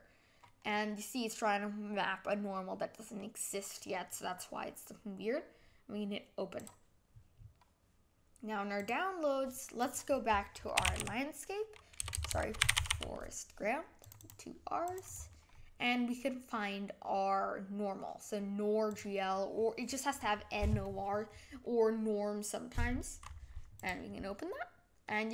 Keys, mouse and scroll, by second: 0.7-6.7 middle drag, 6.7-24.0 drag, 24.6-25.0 scroll up 1, 25.0-25.3 middle drag.